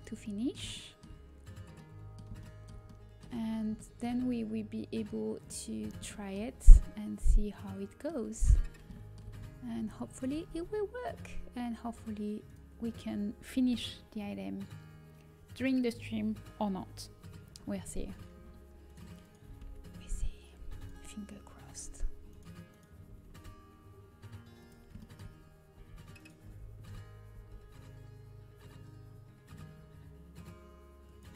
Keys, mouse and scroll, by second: 0.2-7.9 middle drag, 10.2 g, 22.1 g, 23.2 g, 25.7 z, 26.1 click, 26.4 z, 26.7 g.